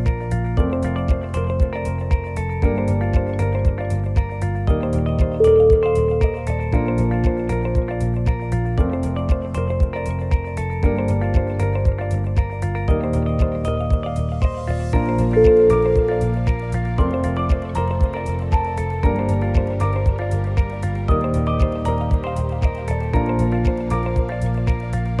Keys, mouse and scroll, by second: 0.1 shift+click, 0.2 click, 0.6 shift+click, 1.3 shift+click, 3.3 g, 7.3 click, 8.0 click, 8.7 alt+click, 9.0 alt+click, 9.5 s, 12.6 click, 13.1 click, 14.7 s, 18.1 s, 23.1 ctrl+z, 23.6 ctrl+z, 24.3 ctrl+z, 24.8-25.2 scroll down 3.